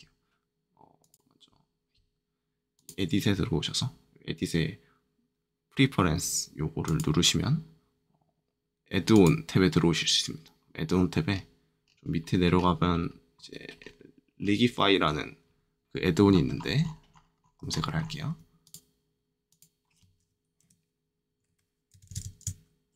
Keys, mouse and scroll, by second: 1.0 click, 2.7 click, 6.8 click, 9.1 click, 10.8 click, 11.2-13.4 scroll down 3, 13.4-13.7 scroll up 2, 13.7-16.2 scroll down 2, 16.2-18.6 scroll up 3, 18.6 click, 20.6 g, 21.4 i, 21.9 BackSpace, 22.0 BackSpace.